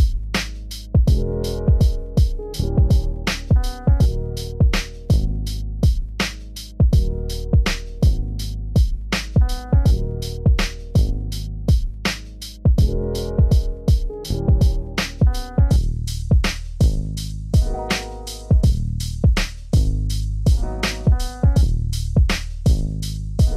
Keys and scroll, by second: 0.6 ctrl+space, 11.0 ctrl+space.